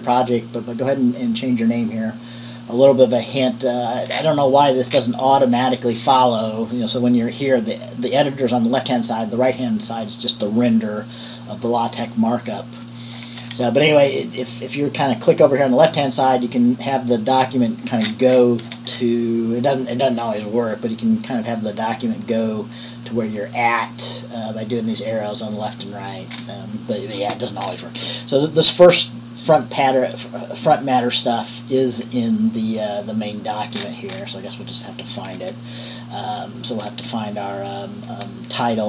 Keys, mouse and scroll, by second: 4.3-5.1 scroll down 1, 5.1 scroll down 1, 7.0 click, 13.3-13.8 scroll up 1, 15.0 click, 15.5 click, 16.9 click, 18.3-19.0 scroll down 1, 20.0 click, 26.5 scroll down 1, 34.0-35.0 scroll down 2, 35.5-35.9 scroll down 3, 37.2-37.7 scroll down 2, 38.4-38.7 scroll up 2.